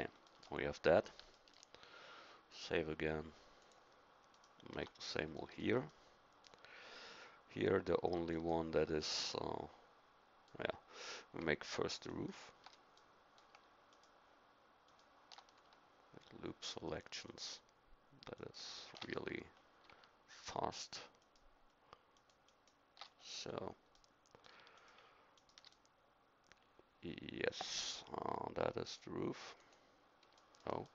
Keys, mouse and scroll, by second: 4.7 Tab, 5.4 middle click, 6.7 middle click, 9.8 middle click, 11.4-20.0 middle drag, 23.5-25.9 middle drag.